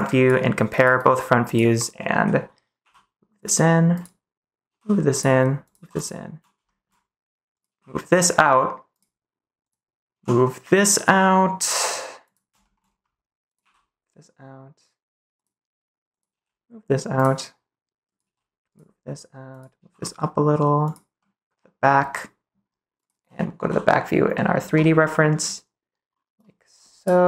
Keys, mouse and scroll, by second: 2.7 g, 3.3 click, 3.9 click, 4.6 g, 5.0 click, 5.6 click, 5.7 g, 6.6 shift+middle click, 6.7 click, 7.6 g, 8.9 click, 10.1 g, 12.2 click, 12.6 middle click, 13.6 g, 16.2 g, 17.1 click, 18.0 click, 18.3 g, 18.6 click, 19.5 click, 19.8 g, 20.8 click, 21.1 middle click, 21.7 middle click, 22.4 click.